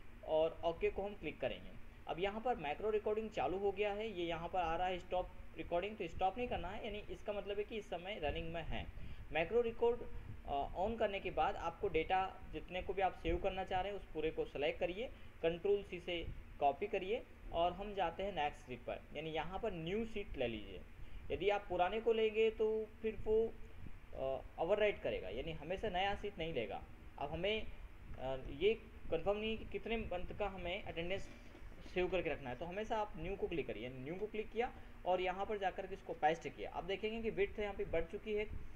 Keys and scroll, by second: 17.2 ctrl+c, 36.6 ctrl+v.